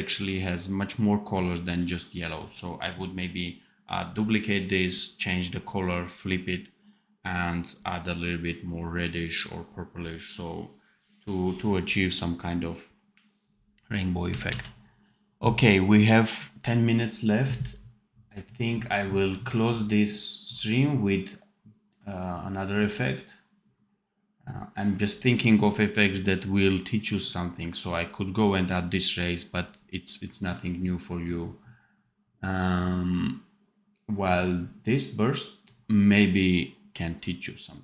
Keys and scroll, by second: 14.4 ctrl+s.